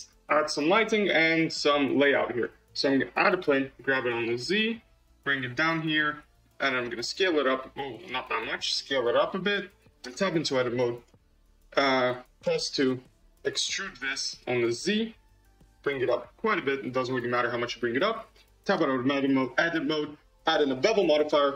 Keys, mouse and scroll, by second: 0.2-1.7 middle drag, 1.7 shift+a, 3.8 g, 5.9-6.9 middle drag, 6.9 s, 8.5 s, 9.9 Tab, 10.9 click, 12.3 2, 12.7 click, 13.5 e, 18.7 Tab, 19.6-21.5 drag.